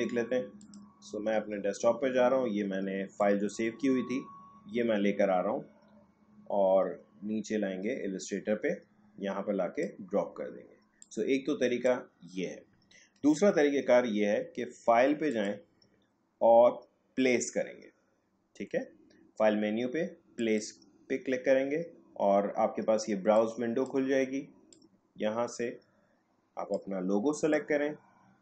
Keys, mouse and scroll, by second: 3.1-13.4 drag, 13.4 Delete, 15.3 click, 15.5 click, 20.4 click, 23.4-27.4 drag.